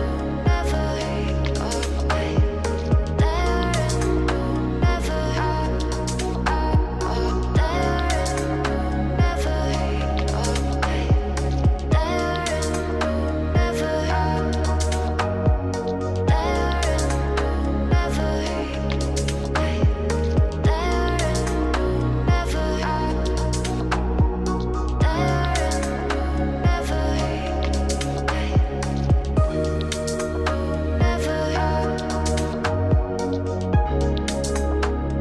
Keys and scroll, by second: 18.0 ctrl+c, 20.2 ctrl+v.